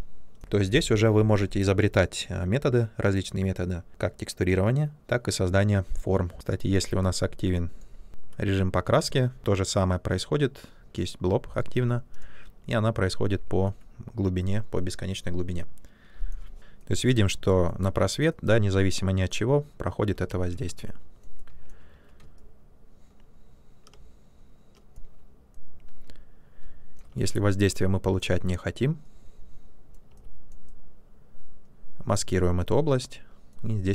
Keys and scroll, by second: 20.3 ctrl+z, 23.9 ctrl+space.